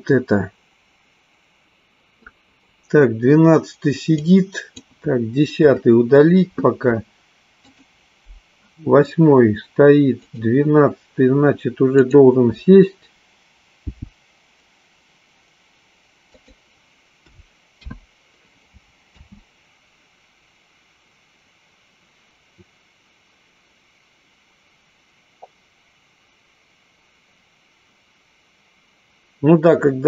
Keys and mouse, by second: 4.3 click, 6.0 Delete, 8.1 click, 10.9 click, 12.1 click, 13.9 g, 16.7 click, 18.1 i, 19.3 space.